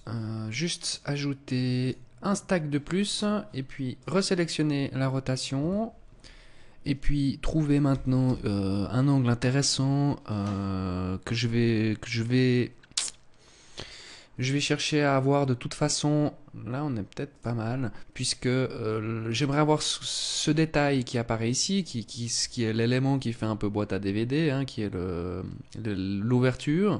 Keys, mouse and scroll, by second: 0.2 click, 1.2 click, 3.4 click, 7.4 r, 16.8 click.